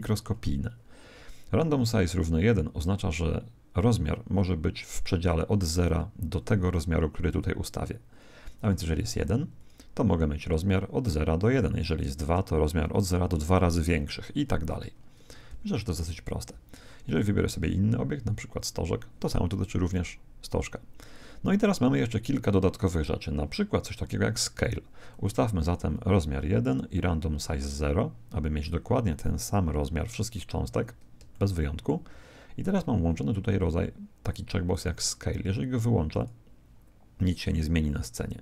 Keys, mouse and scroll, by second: 8.5 click, 11.9 click, 13.5-17.1 middle drag, 17.1 click, 19.9-21.8 middle drag, 25.1-28.1 drag, 31.3-33.0 middle drag, 36.1 click.